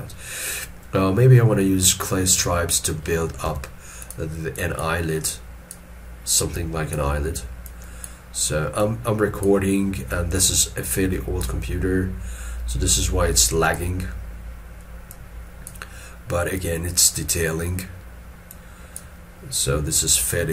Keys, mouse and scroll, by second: 0.1 scroll up 1, 3.5 f, 4.6 double click.